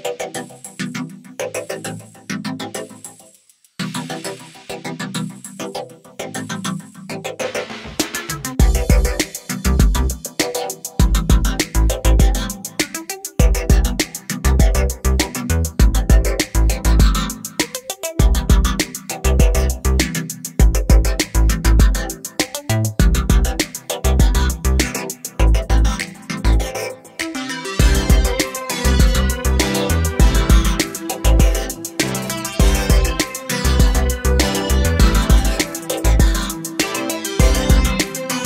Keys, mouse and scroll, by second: 1.2 click, 1.4 double click, 2.7 click, 4.5 click, 7.7 click, 9.7 click, 12.5 click, 12.7 double click, 14.0 click, 15.3 click, 17.5 scroll down 1, 18.3 click, 19.3 scroll up 1, 20.2 scroll down 1, 20.7 scroll up 1, 21.2 click, 22.2 ctrl+click, 23.5 ctrl+o, 24.8 scroll down 1, 29.7 scroll down 1, 31.1 scroll down 1, 35.1 click, 36.3 click.